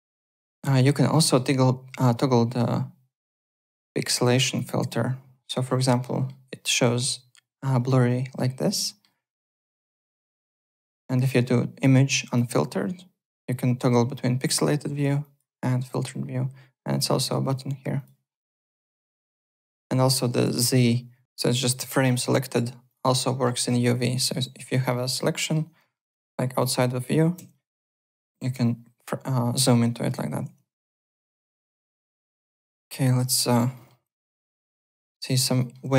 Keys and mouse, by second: 0.1 alt+Tab, 1.1 alt+middle click, 3.2 click, 4.7 click, 6.0 alt+middle click, 8.7 alt+middle click, 10.7 click, 12.2 click, 14.4 click, 15.2 click, 16.9 click, 17.5 click, 18.5 click, 19.4 z, 19.7 click, 20.2 z, 22.8 click, 23.2 alt+middle click, 24.1 alt+middle click, 24.7 alt+middle click, 24.9 alt+right click, 25.3 alt+middle click, 25.9 alt+middle click, 26.5 click, 27.3 z, 30.4 alt+Tab, 30.8 alt+click, 31.2 click, 32.4 alt+right click, 32.7 alt+middle click, 32.9 alt+click, 33.4 click, 33.7 alt+middle click, 34.3 alt+middle click, 34.4 alt+right click, 34.6 alt+middle click, 34.9 alt+click, 35.2 alt+right click, 35.5 alt+middle click, 35.6-35.9 typing.